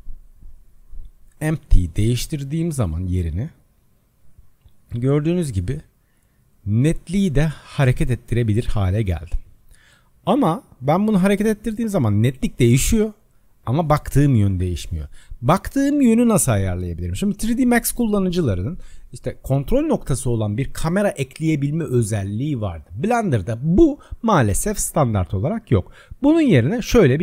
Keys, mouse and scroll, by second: 0.4 click, 25.3 click.